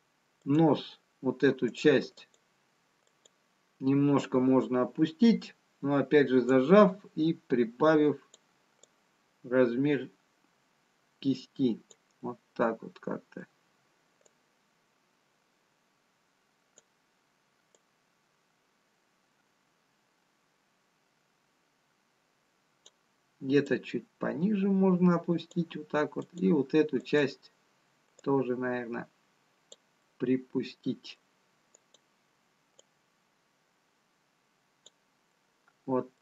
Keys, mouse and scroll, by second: 0.8 click, 5.4 click, 7.9 click, 9.4 click, 13.5 middle click, 15.7 click, 19.9 click, 24.0 click, 26.5 click, 28.5 click, 32.8 middle click, 32.8 click, 35.2 click.